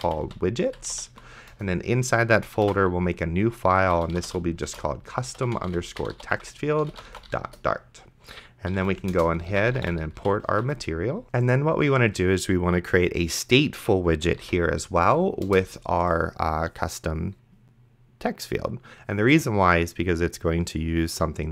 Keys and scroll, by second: 0.0-1.7 typing, 2.8 ctrl+shift+n, 3.6-10.7 typing, 14.4 t, 15.0 Down, 15.5 Return.